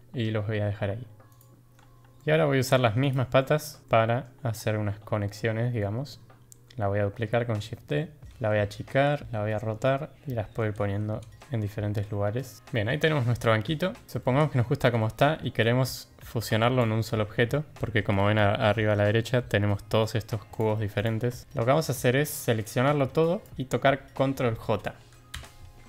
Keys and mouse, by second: 2.1 ctrl+z, 2.1-2.6 drag, 3.0 click, 3.4-3.7 drag, 3.8-4.2 drag, 5.8 drag, 7.0 shift+d, 8.3 s, 9.3 r, 10.1 click, 10.1 g, 10.8 s, 11.8 shift+d, 12.6-14.1 drag, 14.1 ctrl+z, 14.1 g, 14.2 shift+drag, 14.9 drag, 15.7-16.8 drag, 20.5 click, 21.1 g, 21.4 ctrl+z, 21.4 drag, 22.5-23.4 drag, 25.3 ctrl+j.